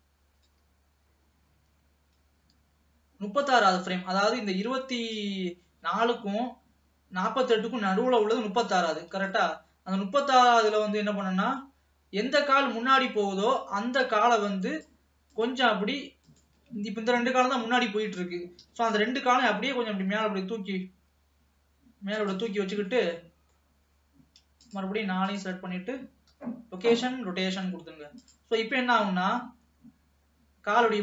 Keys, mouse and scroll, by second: 5.3-8.3 drag, 9.6-11.0 middle drag, 11.0-13.8 drag, 15.5 click, 16.4 shift+click, 18.7 KP_3, 19.8 g, 23.1-24.7 middle drag, 24.7 shift+click, 25.4 shift+click, 28.3 click, 28.7 scroll down 1, 28.9 middle click, 29.3 alt+a, 29.5 space.